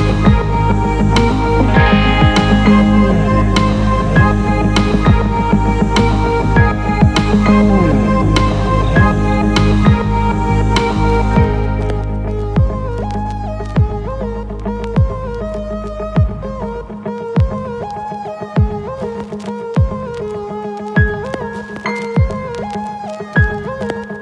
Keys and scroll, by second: 18.1 ctrl+z, 22.9 ctrl+z.